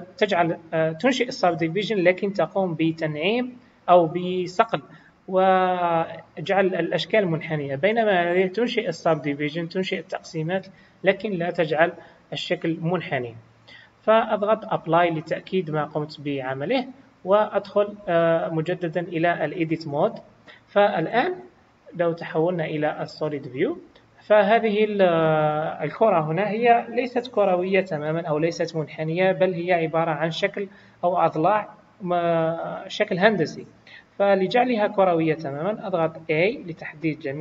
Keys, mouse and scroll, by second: 8.4 click, 13.6-14.9 scroll down 1, 14.9 click, 19.5 Tab, 21.1 KP_1, 23.3 click, 36.4 a.